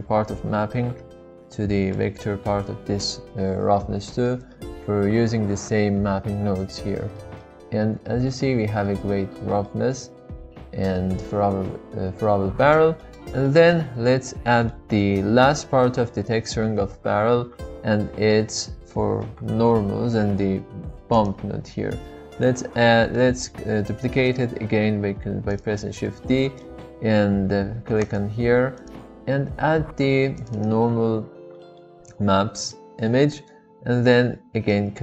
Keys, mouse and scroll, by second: 4.3 middle click, 6.7-7.2 middle drag, 7.4-7.8 middle drag, 8.4-8.9 shift+middle drag, 9.3 shift+middle click, 9.6-11.3 middle drag, 12.7 middle click, 13.5 middle drag, 14.8 middle click, 19.2 middle click, 20.3 g, 23.9 shift+d, 25.5 click, 25.9 middle click, 26.8 middle drag, 28.0 click, 28.7 click, 31.6 middle click, 32.8 middle click, 34.7-35.0 drag.